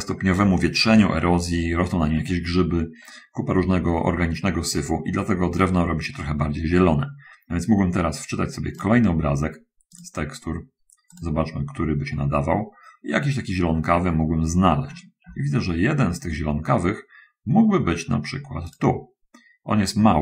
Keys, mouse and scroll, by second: 9.1 click, 10.2 click, 11.0 click, 13.6-14.7 middle drag, 15.1 middle click, 18.7 click.